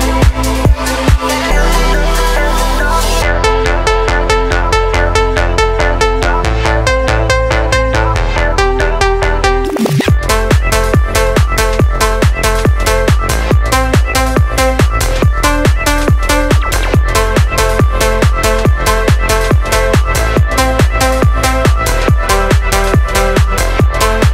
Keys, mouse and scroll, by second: 1.6-2.1 scroll up 1, 2.1-3.0 drag, 3.7 click, 4.4-7.0 drag, 8.6 click, 9.9-10.4 drag, 12.0 click, 12.4 click, 13.6 click, 14.1 click, 15.7-16.1 scroll up 1, 16.1 middle click, 17.6 click, 18.3 click, 21.2 middle click.